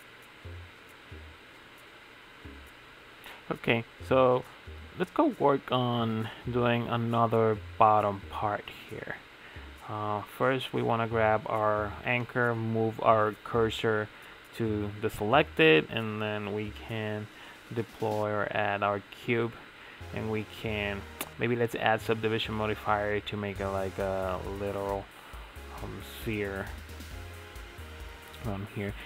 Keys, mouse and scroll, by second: 0.1-1.3 middle drag, 1.3 click, 2.8 click, 3.3 click, 7.2 click, 7.6 click, 9.8 ctrl+z, 10.4 shift+a, 11.0 shift+s, 14.6 shift+s, 15.3 shift+a, 17.0 s, 18.1 scroll up 7, 18.4-19.3 shift+middle drag, 19.3 Tab, 20.5 click, 21.0 click, 22.3 click, 22.8 middle click, 23.2 Tab, 23.6 Tab, 23.9 click, 24.7 3, 24.8 click, 25.2-27.7 middle drag, 27.7 i.